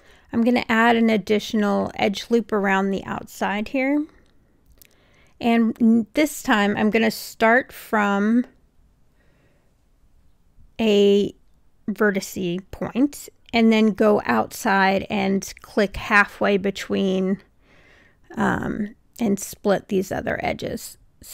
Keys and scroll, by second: 17.3 super+z.